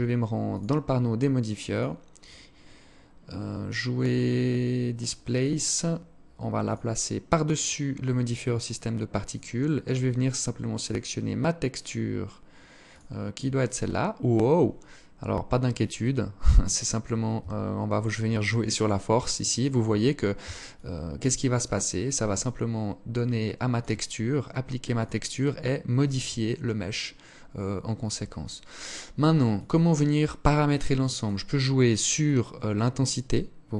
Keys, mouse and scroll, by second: 0.7 click, 1.2 click, 5.6 click, 6.6 click, 9.8 click, 9.8 click, 13.2-14.8 scroll up 2, 15.0 click, 19.8 shift+click, 24.0 click, 25.4 alt+click, 28.6 click, 31.2 click.